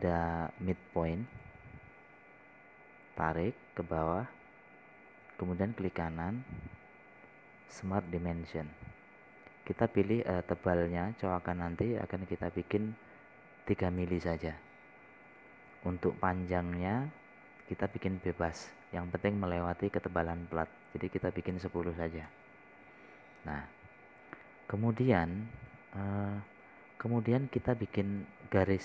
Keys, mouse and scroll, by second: 5.9-6.4 scroll up 1, 6.4 scroll down 1, 7.1-8.2 right drag, 9.4 click, 10.3 scroll down 1, 11.9 click, 15.1 KP_3, 16.8 click, 17.4 scroll down 1, 18.0 scroll down 1, 19.2 click, 23.0 KP_1, 23.3 KP_0, 24.8 scroll up 1, 25.2 scroll down 1, 26.5 click, 27.0 right click, 28.4-28.8 drag.